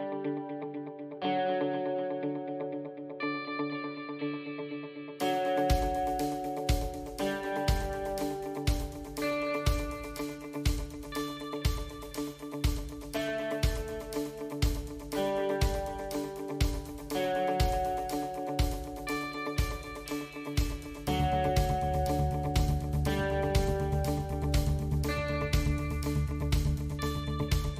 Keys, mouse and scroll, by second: 0.2 middle click, 1.5 shift+middle click, 2.7 click, 3.6 middle click, 5.1 click, 5.9 e, 10.3 e, 11.9 s, 16.7 a, 18.3 click, 18.9 click, 20.7 click, 21.0 click, 22.6 KP_1, 23.7-24.1 scroll up 2, 24.2 shift+middle click, 24.6 middle click, 26.6 3, 27.3 alt+click.